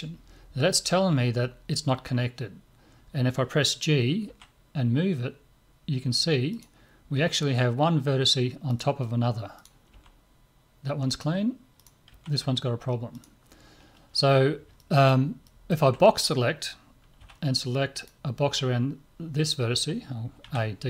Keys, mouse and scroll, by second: 4.3 g, 7.1 g, 9.6 right click, 9.9 g, 11.8 right click, 12.1 g, 14.8-17.2 middle drag, 17.2 b, 20.4 a.